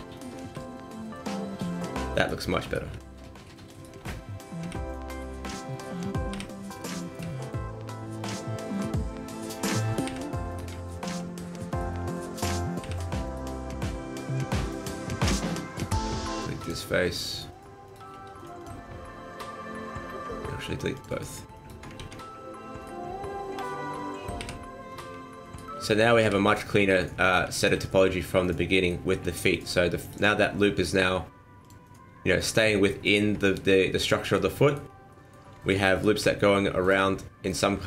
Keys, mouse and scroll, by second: 0.1 right click, 0.5 f, 1.0 middle click, 1.7 right click, 2.1 shift+right click, 2.6 right click, 3.7 shift+right click, 4.6 f, 5.1 right click, 5.7 shift+right click, 6.3 f, 6.9 middle click, 7.3 shift+middle click, 7.7 scroll up 1, 8.7 right click, 9.3 shift+right click, 10.1 f, 10.5 right click, 10.9 shift+right click, 11.7 right click, 12.1 shift+right click, 12.8 f, 13.2 right click, 14.3 scroll up 2, 14.6 shift+middle click, 14.9 scroll down 1, 16.6 click, 17.3 right click, 17.9 shift+right click, 18.3 x, 20.9 click, 21.5 alt+right click, 21.9 ctrl+x, 22.8 right click, 23.6 shift+right click, 24.4 f, 24.9 right click, 25.4 shift+right click, 26.2 f, 26.3 scroll down 2, 26.5 middle click, 27.5 shift+middle click, 27.9 middle click, 30.0 alt+right click, 31.6 click, 32.3 alt+right click, 33.0 alt+right click, 33.4 scroll down 3, 33.5 middle click, 34.8 scroll up 3, 35.1 middle click, 35.9 alt+right click, 36.3 middle click.